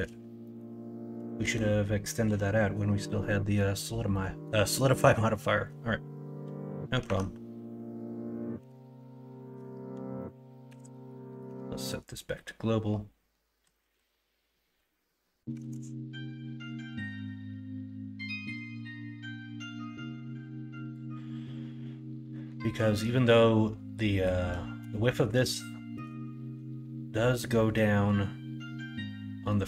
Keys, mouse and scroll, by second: 1.1 KP_1, 1.4 KP_3, 2.2 KP_1, 4.1 middle click, 7.0 Tab, 8.5 l, 11.4 ,, 13.6 KP_3, 13.9 KP_1, 15.6 alt+z, 16.6-25.3 drag, 25.6 shift+middle click.